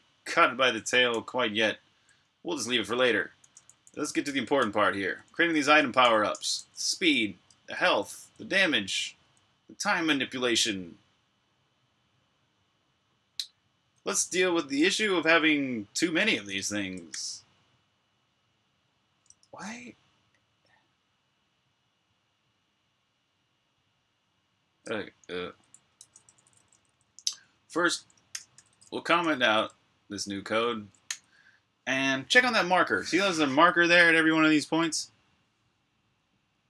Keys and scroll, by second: 0.9 super+j, 3.3-9.1 typing, 17.0 j, 19.3 l, 25.8 ctrl+v, 25.8-29.0 typing, 30.9 super+r, 30.9-32.4 typing, 32.5 super+h.